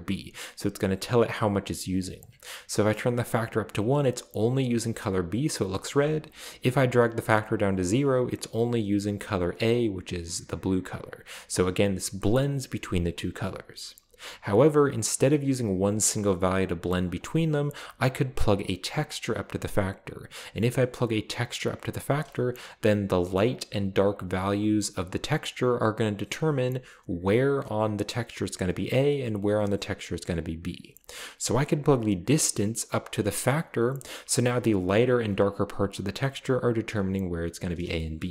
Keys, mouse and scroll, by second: 0.6-1.6 drag, 2.2 click, 5.2 scroll down 2, 6.7-7.8 drag, 11.1-13.5 drag, 15.2-17.1 drag, 32.0-33.5 drag, 34.1 click, 34.3-37.6 scroll up 1, 37.6-38.3 scroll down 1, 38.0-38.3 shift+middle drag.